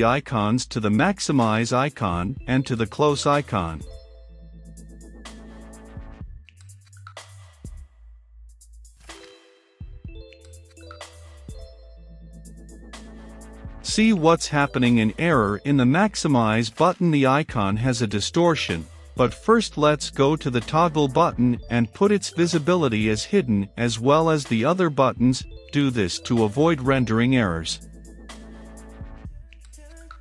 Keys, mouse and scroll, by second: 17.2-21.2 middle drag, 21.2-26.2 drag, 26.2 middle click, 26.9-28.4 drag, 28.4 Return, 28.7-30.2 typing, 29.4 Return.